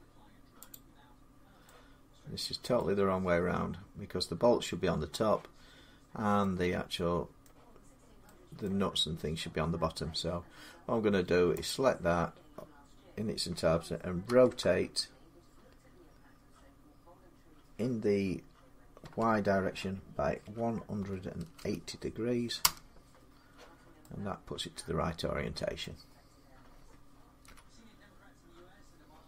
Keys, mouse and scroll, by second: 0.5 click, 1.4 middle click, 2.5 middle click, 7.2-10.7 middle drag, 10.7-11.4 scroll down 2, 11.4 click, 14.0 r, 18.8 y, 20.2-21.3 typing, 22.4 Return, 25.6-27.3 middle drag, 27.2 1.